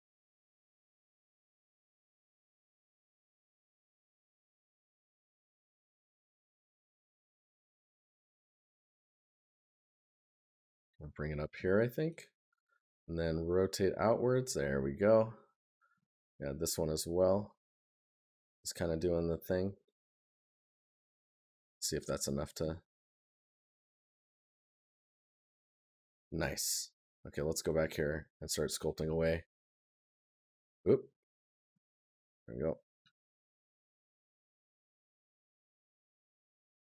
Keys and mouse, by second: 3.4 right click, 5.7 right click, 8.9 right click, 11.5 right click, 14.5 right click, 22.2 right click.